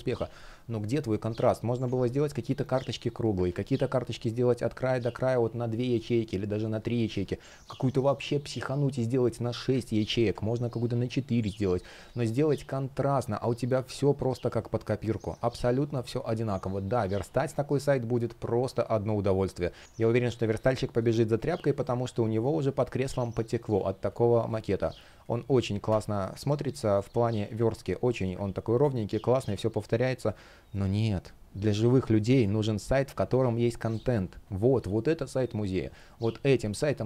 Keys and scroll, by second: 3.1 super+z, 6.8 super+z, 9.6 super+z, 11.7 super+z, 12.8 space, 26.6 space, 27.8 space, 28.5 space, 33.5 space.